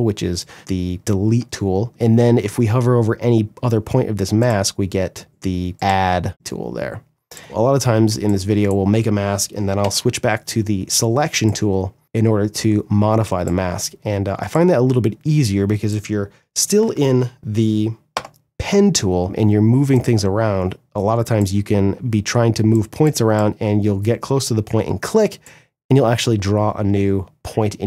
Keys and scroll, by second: 7.7 space, 9.3 v, 17.6 g, 21.5 ctrl+z, 25.9 ctrl+z.